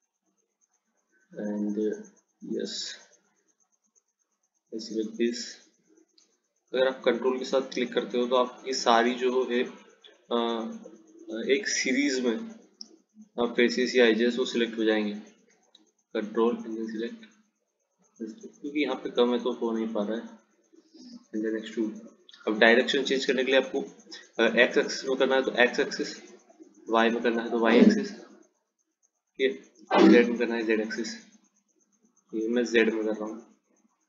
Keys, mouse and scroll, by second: 1.6 click, 2.7 click, 4.6 click, 7.8 ctrl+click, 10.1 click, 13.1 middle click, 14.1 click, 16.6 ctrl+click, 18.3 click, 21.3 click.